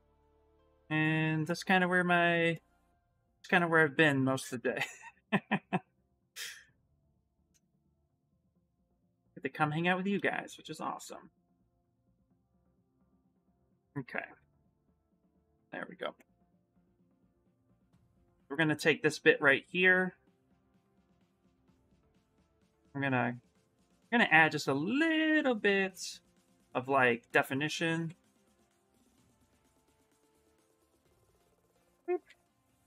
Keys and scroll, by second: 10.7 2, 17.7 shift+f, 18.0 shift+f, 20.6 w, 23.5 q, 24.5 w, 26.1 q, 27.7-29.8 typing, 32.0 q.